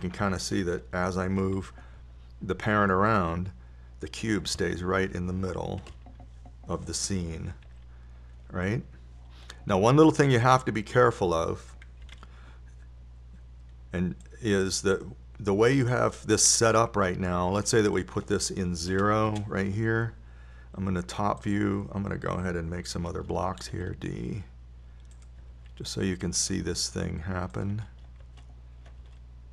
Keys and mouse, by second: 0.4 KP_1, 3.0 g, 7.3 z, 9.0 g, 13.4 KP_7, 19.3-21.5 drag, 22.8-24.9 right drag, 25.2 shift+d, 26.7 click, 27.0 shift+d, 27.2 click, 28.0 shift+d.